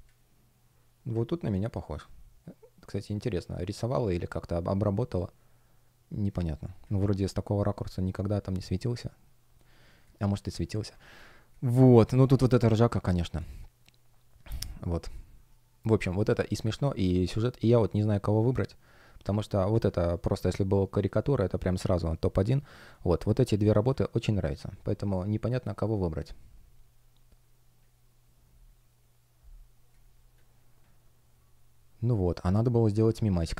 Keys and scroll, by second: 9.4 space, 11.0 space, 13.2 space, 16.7 space.